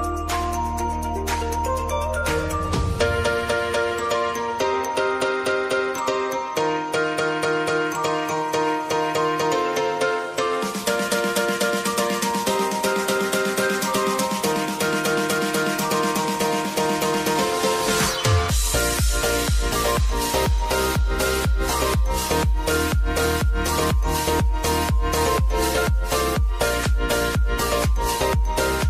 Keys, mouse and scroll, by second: 0.8-5.9 drag, 5.9 ctrl+alt+Home, 7.2 click, 15.5 Return, 16.4 click, 18.1 =, 19.9-28.8 drag.